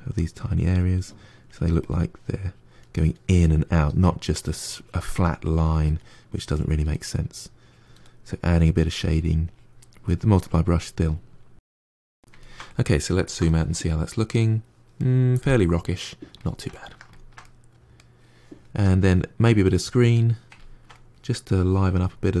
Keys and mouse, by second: 0.4 click, 0.7 middle click, 1.1 click, 1.5 middle click, 1.9 click, 2.2 middle click, 2.8 click, 3.6 middle click, 4.0 click, 4.3 middle click, 4.8 click, 5.1 middle click, 5.5 click, 5.8 middle click, 6.1 click, 6.8 middle click, 7.6 click, 8.0 middle click, 8.4-9.8 drag, 9.8 middle click, 10.3 click, 10.5 middle click, 11.0 click, 11.3 middle click, 11.7 click, 12.3-18.7 ctrl+middle drag, 18.7-20.0 drag, 20.0-21.4 middle drag, 21.4-22.4 drag.